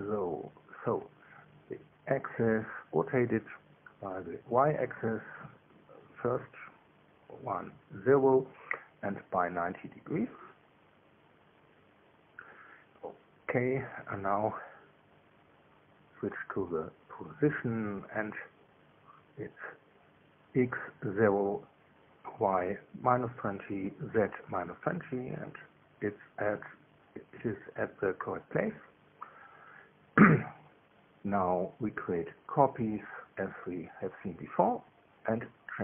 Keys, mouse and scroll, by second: 2.4 click, 3.4 click, 6.4 KP_0, 6.8 Tab, 7.4 KP_1, 7.6 Tab, 7.9 KP_0, 8.8 Return, 10.7 click, 11.3-12.2 typing, 13.4 Return, 17.8 click, 19.6 KP_0, 19.9 Tab, 22.7 Tab, 23.4 KP_Subtract, 23.8 KP_2, 23.9 KP_0, 24.4 KP_Enter, 26.3-28.5 drag, 31.4 ctrl+c, 32.8 click, 34.0 ctrl+v, 35.5 click.